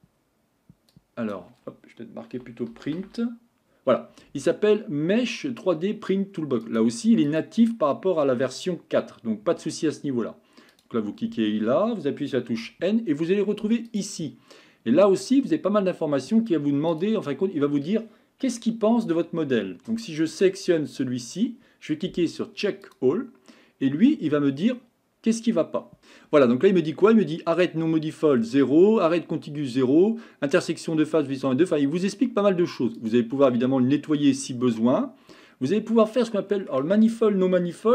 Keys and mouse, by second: 12.5 n, 13.9 click, 18.6-19.5 shift+middle drag, 20.0-20.5 shift+middle drag, 33.0 click, 36.0-36.7 middle drag.